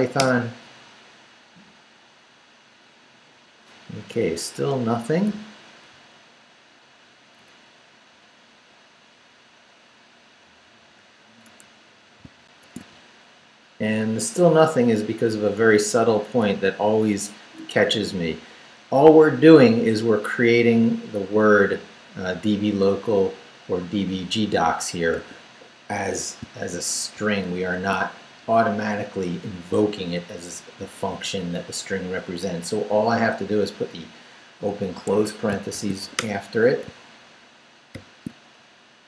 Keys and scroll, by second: 0.2 Return, 4.5 Return, 6.1 Left, 7.4 Up, 8.7 Down, 12.4 alt+shift+super+z, 15.1 Left, 15.6 Right, 25.2 a, 27.1 shift+9, 27.5 shift+0, 35.1 Escape, 35.7 shift+;, 36.0 shift+w, 36.2 Return, 37.9 shift+;, 38.7 shift+Up.